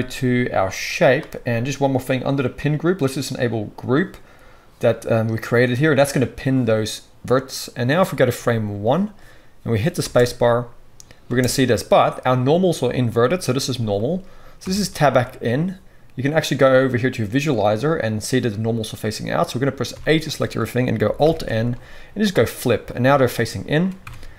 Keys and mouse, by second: 5.8-8.9 drag, 9.9 space, 11.3 space, 14.6 Tab, 19.9 a, 21.2 alt+n, 24.1 Tab.